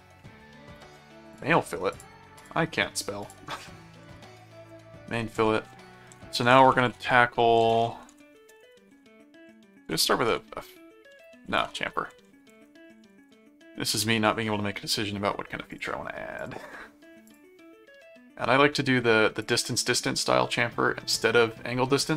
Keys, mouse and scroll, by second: 0.8-1.9 drag, 1.9 click, 3.2 click, 4.1 n, 4.7 Return, 5.3 click, 5.9-13.9 typing, 7.6 ctrl+a, 9.7 ctrl+BackSpace, 9.7 ctrl+a, 9.8 ctrl+f, 12.6 ctrl+a, 13.9 Return, 15.7 click, 16.4 click, 17.2 click, 19.4 click.